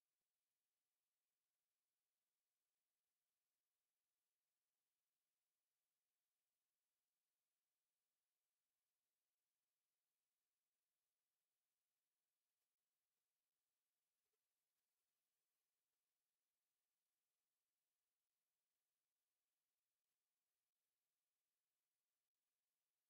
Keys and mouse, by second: 6.2-8.6 drag, 10.9-12.4 drag, 14.7-17.7 drag, 18.9-19.3 middle drag, 20.4 middle click, 22.0-23.0 middle drag.